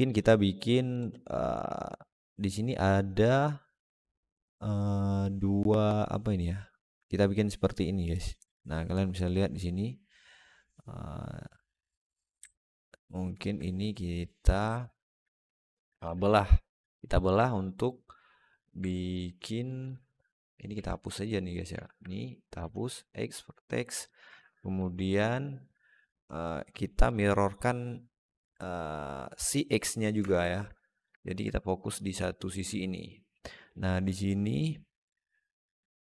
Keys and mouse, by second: 12.4 alt+middle click, 14.6 alt+middle click, 15.7 ctrl+r, 17.3 middle click, 18.7 alt+middle click, 19.5 click, 20.2 alt+middle click, 20.6 alt+z, 21.1 click, 21.7 alt+middle click, 22.4 x, 23.9 alt+middle click, 24.2 Tab, 24.7 alt+z, 25.0-25.5 alt+middle drag, 26.9 click, 30.0 Tab, 30.6 alt+middle click, 31.4 alt+middle click, 31.8 alt+shift+middle click, 32.1 alt+middle click.